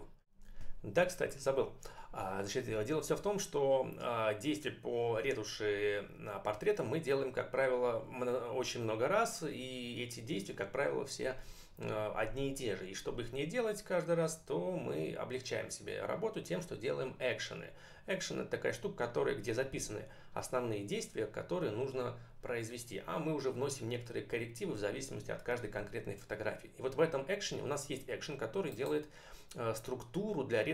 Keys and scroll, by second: 28.8 space.